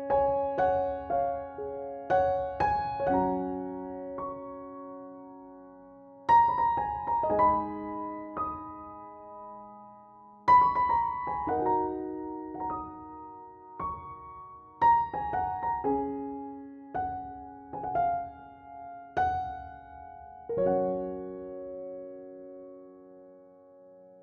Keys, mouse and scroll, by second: 0.9 Delete, 2.1 click, 3.8 ctrl+c, 4.7 click, 5.7 ctrl+v, 6.7 scroll up 1, 8.2-10.6 drag, 19.5 KP_2, 22.8-24.2 drag.